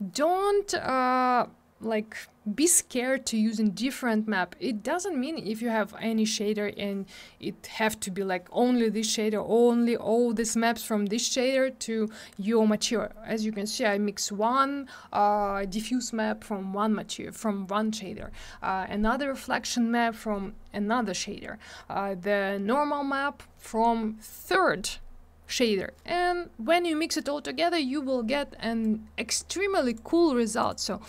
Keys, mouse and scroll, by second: 28.8 click, 29.8 click, 29.9 click, 30.6 click, 30.6 click, 31.0 click.